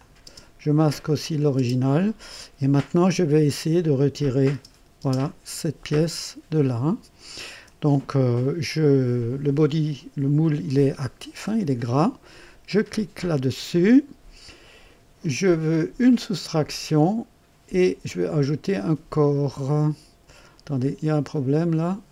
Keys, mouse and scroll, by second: 0.2 space, 1.1 click, 1.5 space, 4.1 click, 4.4 space, 4.9 space, 13.1 click, 15.2 click, 16.3 click, 20.7 click.